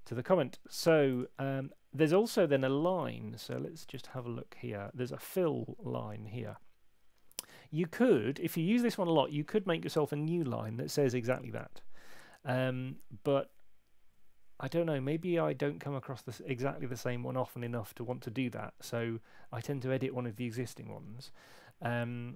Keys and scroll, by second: 3.9 super+Tab.